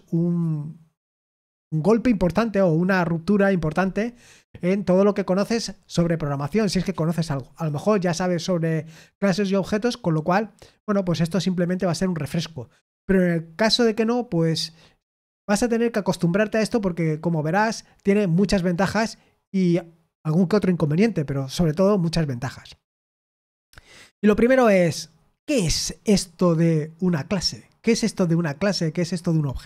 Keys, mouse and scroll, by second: 28.8 scroll up 1.